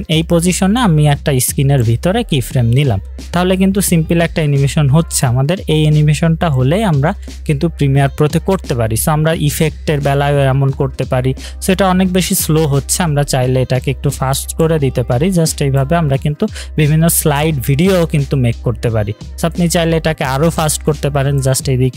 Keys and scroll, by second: 8.3 space, 12.7 space, 16.0 space, 20.1 space.